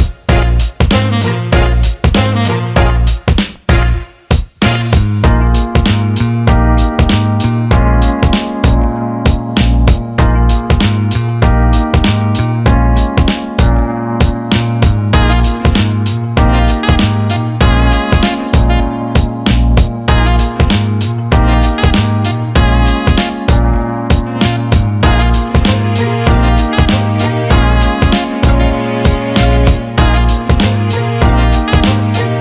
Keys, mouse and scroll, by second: 1.3 shift+a, 5.3 click, 6.6 click, 7.9 click, 8.6 alt+middle click, 10.3-10.6 alt+middle drag, 11.7-13.2 drag, 13.9 click, 15.3-17.0 drag, 17.3 alt+middle click, 18.8 click, 20.6 click, 21.8 alt+middle click, 22.9-24.1 drag, 24.3 alt+middle click, 25.2 click, 26.3 click, 27.2 alt+middle click, 27.6 alt+click, 28.4 click, 28.8 alt+middle click, 29.9 alt+middle click, 32.0 click, 32.1 click, 32.3 click.